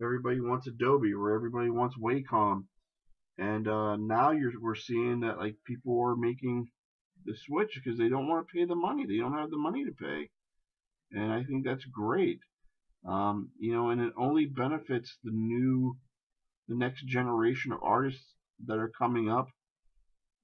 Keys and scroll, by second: 5.4 shift+space.